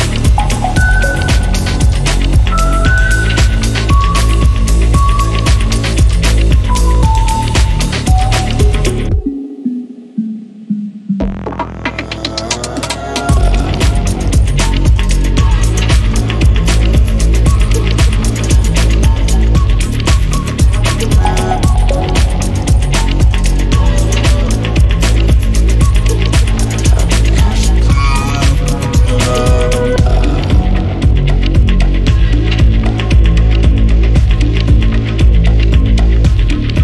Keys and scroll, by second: 22.1 Escape.